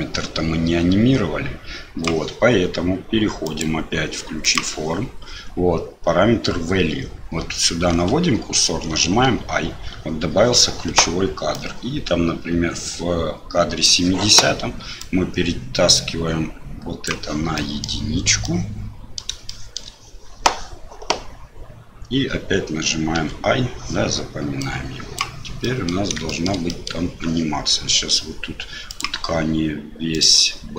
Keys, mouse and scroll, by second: 3.4 click, 4.4 click, 9.2 i, 11.5-13.8 drag, 15.0-17.0 drag, 17.5 middle click, 18.4 middle click, 19.4 shift+middle click, 23.2 i, 24.6 click, 25.6 middle click, 26.2 shift+middle click, 26.7 middle click, 28.9 click, 30.2-30.7 drag.